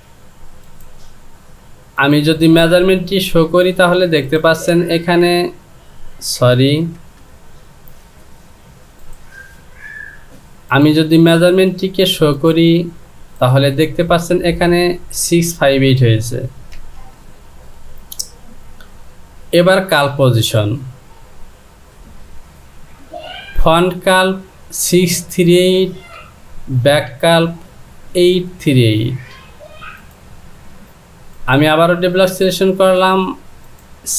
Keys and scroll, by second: 16.8 ctrl+z.